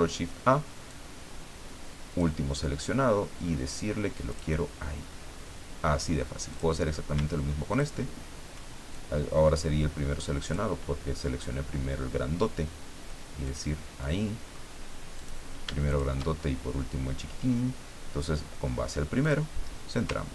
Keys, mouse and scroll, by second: 0.9-2.3 drag, 4.3 click, 6.5 click, 7.7 shift+click, 8.9-10.7 shift+drag, 13.5 click, 14.0 middle click, 15.2 click, 15.9 shift+click, 19.2 click, 20.2-20.3 ctrl+scroll down 2.